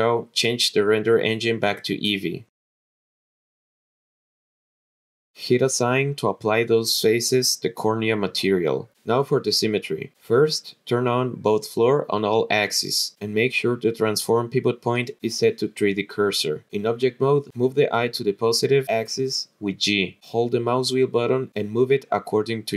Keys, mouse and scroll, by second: 0.2 middle click, 1.0 click, 1.5 click, 3.1 click, 3.4-4.6 scroll down 8, 5.2 click, 5.4 l, 5.7 click, 6.5 click, 9.6-14.9 drag, 15.8 click, 17.3 click, 18.7 click, 18.9 middle click, 18.9-19.6 scroll down 2, 20.0 g, 20.2 click, 20.2 middle click.